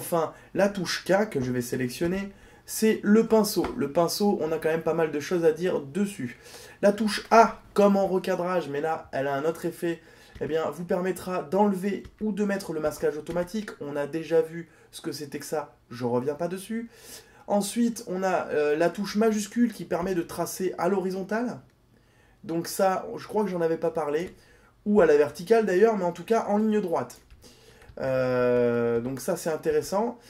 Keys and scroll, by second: 1.0 k, 7.6 a.